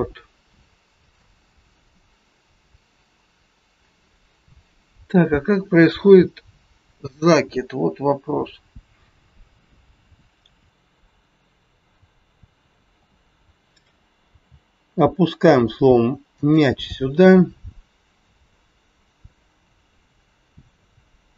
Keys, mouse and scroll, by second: 1.2 click, 16.3 g, 17.5 scroll up 1, 19.3 middle click.